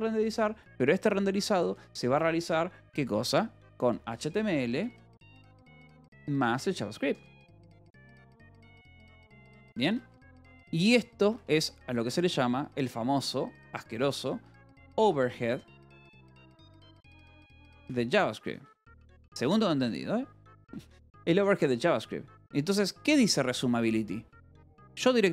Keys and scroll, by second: 0.6 BackSpace, 0.9 =, 2.0 space, 3.5-6.0 typing, 7.3-11.3 typing, 14.4-21.0 typing, 21.6 Escape, 23.0 h, 25.2 l.